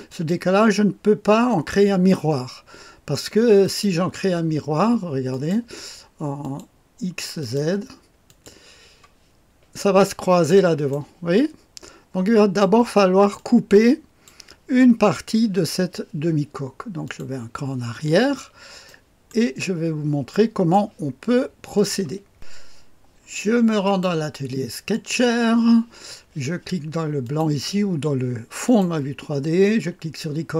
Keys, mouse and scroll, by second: 0.1 click, 1.5 click, 1.9 click, 3.6 click, 5.3 click, 6.4 click, 7.4 click, 8.3 click, 9.7-10.5 scroll up 1, 10.5 middle click, 11.4-12.6 drag, 13.4 click, 17.0 click, 18.1-18.9 scroll down 1, 18.9 right click, 19.7 middle click, 19.7-20.3 scroll down 2, 20.3 middle click, 21.8 click, 23.8 click, 24.9 click, 27.2 click, 28.6 click.